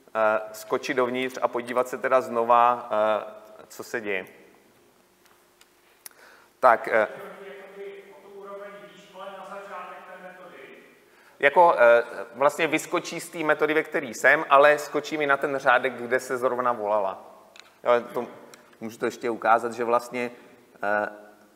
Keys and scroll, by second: 1.3 F8.